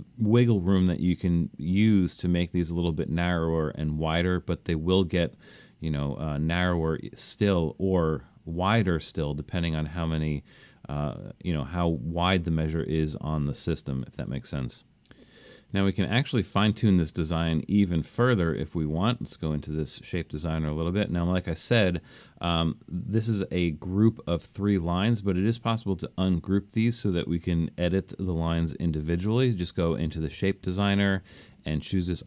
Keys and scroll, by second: 6.3 Up, 9.0 Down, 13.0 super+z, 13.4 super+z, 15.8 alt+super+a.